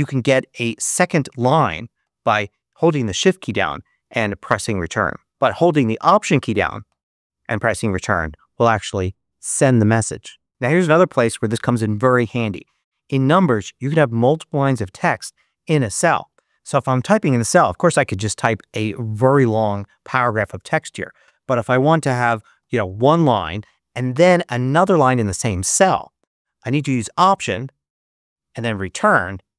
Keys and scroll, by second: 3.6 shift+Return, 5.3 BackSpace, 6.8 alt+Return, 22.0-23.8 typing, 27.9 alt+Return.